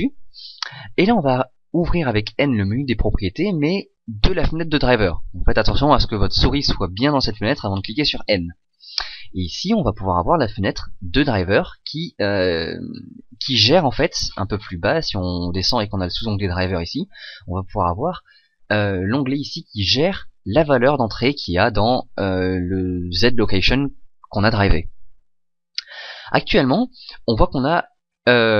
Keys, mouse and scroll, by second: 2.8 n, 9.7-11.5 drag, 13.9-21.8 middle drag.